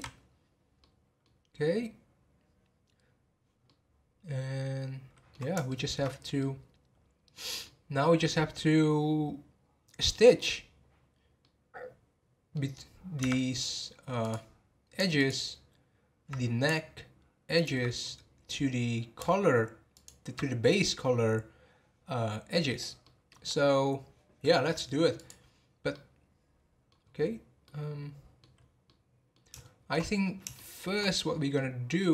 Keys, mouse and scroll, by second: 0.8-6.1 middle drag, 6.1 scroll up 3, 6.4-9.6 middle drag, 11.4-12.6 middle drag, 12.6 scroll down 1, 13.2 Tab, 14.2-15.2 drag, 17.5 alt+click, 18.2-18.6 scroll up 2, 19.9 alt+click, 23.0 middle click, 23.4-24.0 scroll down 2, 24.0-25.1 scroll down 1, 25.1 click, 25.9-27.0 middle drag, 27.0-27.6 scroll up 3, 27.6-28.8 middle drag, 28.8 scroll up 1, 29.0 middle click, 29.5 shift+scroll up 1, 30.2-30.5 scroll up 1, 30.5 shift+middle click, 31.0 scroll down 3, 31.5-32.1 middle drag.